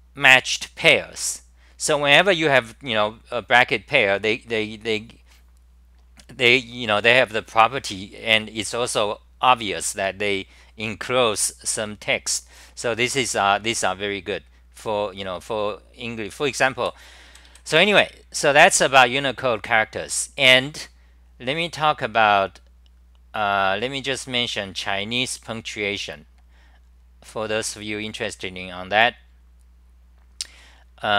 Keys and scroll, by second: 16.6 d, 21.6-22.4 typing.